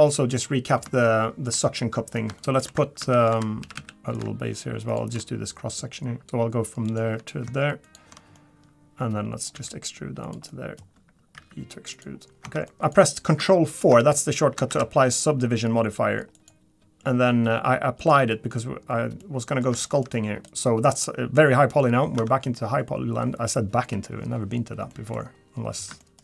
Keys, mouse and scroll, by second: 0.1 middle click, 0.5-0.8 scroll up 3, 1.0 shift+middle click, 1.1 shift+middle click, 1.6 middle click, 2.4 shift+middle click, 2.7 2, 3.0 Tab, 3.3 2, 3.6 a, 3.7 a, 3.9 middle click, 3.9 click, 4.9 alt+shift+click, 5.2 middle click, 6.2 middle click, 6.2-6.6 scroll up 1, 6.8 click, 7.8 ctrl+shift+click, 8.3 middle click, 9.5 e, 10.5 middle click, 11.3 e, 12.2 scroll down 2, 12.4 Tab, 12.7 middle click, 12.7 middle click, 12.8 shift+middle click, 12.8 click, 14.8 ctrl+4, 16.3 click, 18.0 click, 18.7-19.2 scroll down 2, 19.2 middle click, 19.8 shift+middle click, 20.1-20.5 scroll up 2, 20.5 Tab, 20.5 click, 22.3 Tab, 24.9 middle click, 25.2 scroll down 1, 25.3-25.9 scroll up 2, 26.0 shift+middle click.